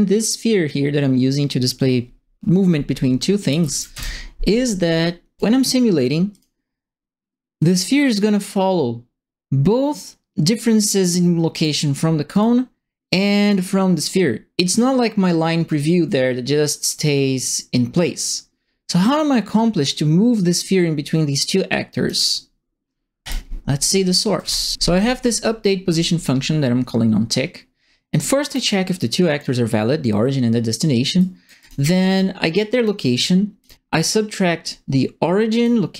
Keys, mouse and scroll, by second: 3.4 KP_0, 3.6 KP_Decimal, 3.7 KP_5, 3.9 KP_Enter, 6.3 click, 7.5-11.6 drag, 12.3 click, 13.4-15.6 drag, 20.3-22.0 drag, 23.2 click, 24.4 ctrl+e, 28.2 right click, 28.8 click, 31.1 right click, 31.6 click, 32.5 click, 33.6 click, 35.5 click.